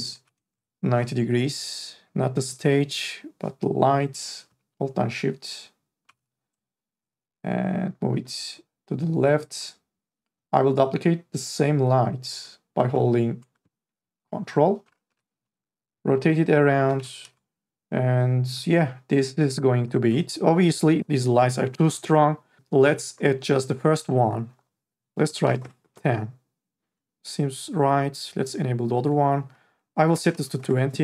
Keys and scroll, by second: 0.7 ctrl+z, 6.1 e, 15.1 r, 17.0 e, 25.6 Return, 30.2 KP_2, 30.6 Return.